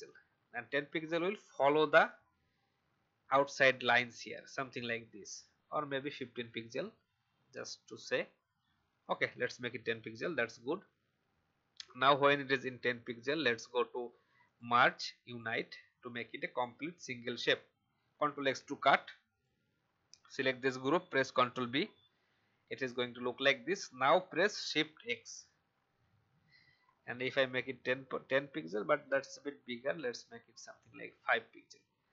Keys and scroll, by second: 18.4 ctrl+x, 21.3 ctrl+b, 25.0 shift+x.